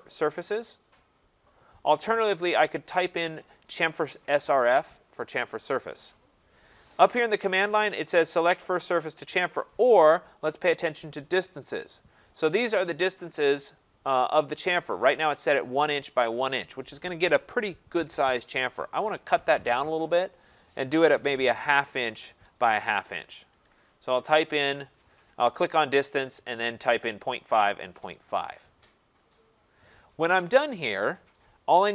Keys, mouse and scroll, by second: 1.9 click, 20.1 click, 20.9-22.0 typing, 23.1-24.8 typing.